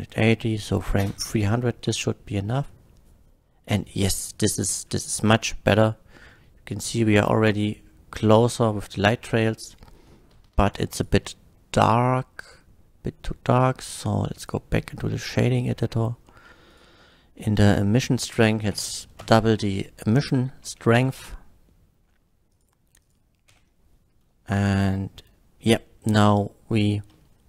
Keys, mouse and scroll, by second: 1.0 space, 1.9 F12, 11.0 click, 12.4 click, 14.4 click, 15.7 middle click, 16.0 middle click, 16.7 click, 17.2 middle click, 18.0 click, 18.8 KP_8, 19.2 Return, 19.5 KP_8, 20.2 click, 21.0 F12, 22.5 click, 23.0 click.